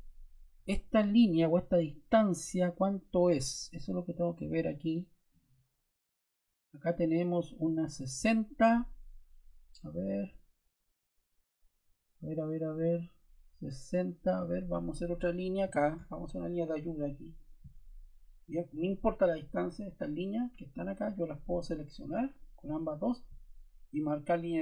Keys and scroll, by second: 15.6 l, 19.7 Escape.